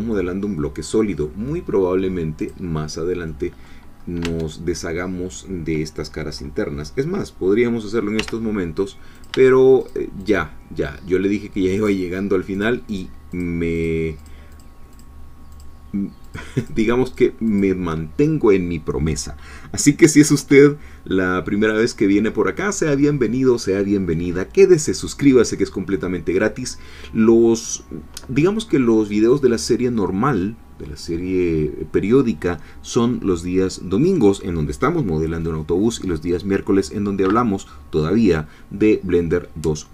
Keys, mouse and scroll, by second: 2.4 click, 3.3 middle click, 3.9 scroll up 1, 4.2 Tab, 8.2 3, 9.2 shift+click, 9.9 shift+click, 11.8 shift+click, 13.0 shift+click, 13.8 shift+click, 14.6 shift+click, 15.6 shift+click, 16.7 shift+click, 17.6 shift+click, 21.6 scroll down 2, 21.9 middle click, 25.6-27.8 middle drag.